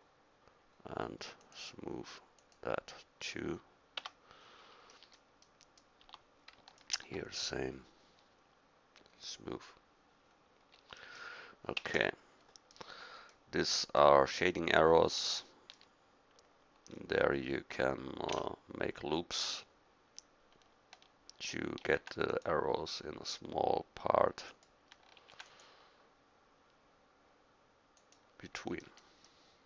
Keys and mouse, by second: 4.0 Tab, 6.0 Tab, 11.0 middle click, 11.8 Tab, 18.3 Tab, 21.8 ctrl+r, 25.2 ctrl+r.